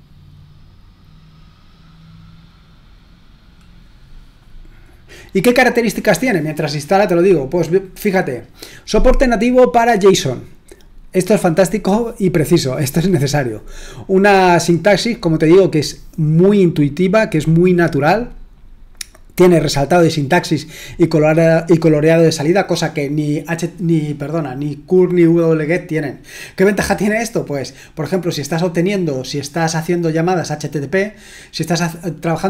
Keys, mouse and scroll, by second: 5.2-7.3 scroll up 3, 7.3-7.9 scroll down 2.